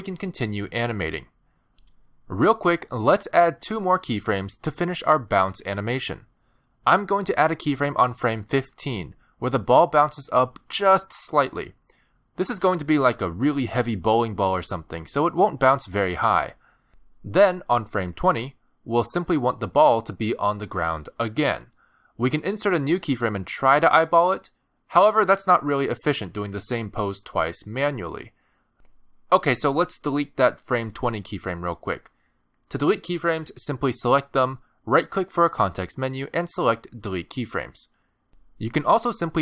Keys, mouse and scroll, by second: 0.0-0.4 scroll down 7, 1.5-2.3 ctrl+scroll up 1, 3.1-3.5 ctrl+scroll down 1, 10.2-11.5 alt+scroll up 8, 12.5 middle click, 13.4 scroll up 2, 13.7 g, 17.2 middle click, 18.1 scroll down 1, 19.5 click, 20.0 middle click, 21.0-21.5 scroll up 3, 21.5 middle click, 21.8 shift+middle click, 22.0 scroll down 1, 22.1 g, 23.8 middle click, 24.8 g, 27.6 middle click, 32.0 click, 35.9 right click.